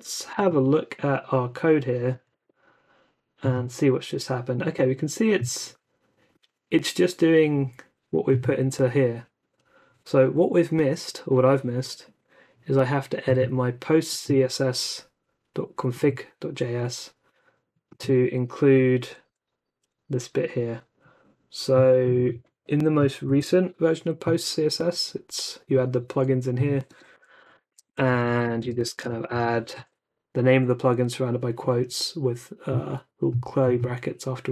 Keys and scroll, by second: 0.3 alt+super+u, 2.3 super+r, 23.2 super+c, 26.6-29.4 typing, 28.1 super+v, 28.2 Right, 29.7 super+s.